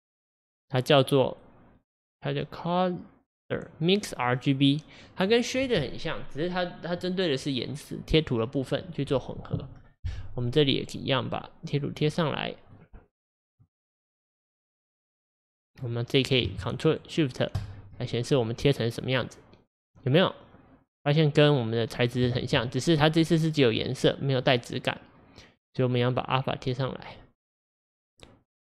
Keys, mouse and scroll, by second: 10.8-11.9 drag, 12.7-13.5 drag, 15.2-15.9 drag, 17.6 ctrl+shift+click, 20.1-22.4 drag, 22.4 ctrl+z, 23.3-24.5 middle drag, 24.5-27.2 drag.